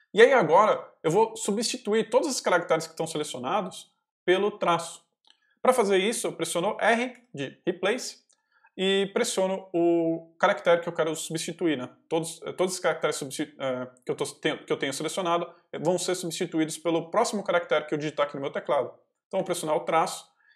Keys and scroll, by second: 7.0 r, 19.2 -.